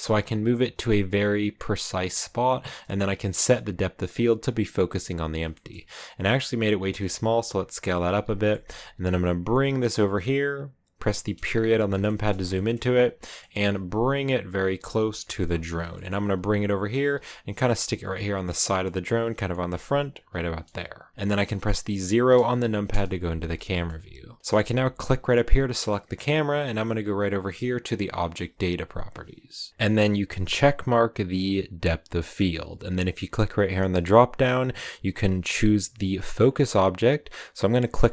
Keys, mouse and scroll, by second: 2.4-4.1 scroll down 2, 4.7 s, 5.4 shift+middle click, 5.6-6.3 scroll up 2, 6.3-6.7 scroll down 1, 6.7 s, 7.7 middle click, 8.0 s, 8.4 middle click, 8.8 g, 11.2 KP_Decimal, 11.8 scroll down 4, 11.9 middle click, 12.8-13.1 scroll down 5, 13.1 middle click, 13.5 g, 15.1 KP_Decimal, 15.7 scroll down 4, 15.8 middle click, 16.0 scroll up 3, 16.2 g, 17.0 g, 17.7 s, 18.4 middle click, 18.8 g, 19.4 middle click, 19.6 g, 21.1 KP_0, 22.3 KP_0, 22.8 KP_0, 23.6-25.2 shift+middle drag, 25.2-29.7 right drag, 29.7-31.7 shift+middle drag, 31.7-38.1 drag.